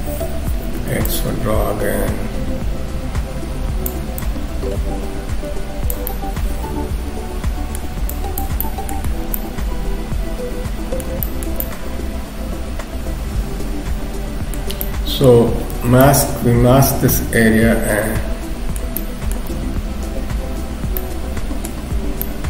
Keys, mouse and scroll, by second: 0.8 x, 1.1 click, 4.3 click, 6.1 middle click, 8.1 click, 8.6 middle click, 9.1-10.3 scroll down 3, 9.3 middle click, 11.3 shift+middle click, 11.6 middle click, 14.8 middle click, 15.7 m, 16.0 middle click, 19.0 shift+middle click, 19.7 scroll up 1, 21.0 middle click, 21.0 scroll up 3, 22.2 middle click.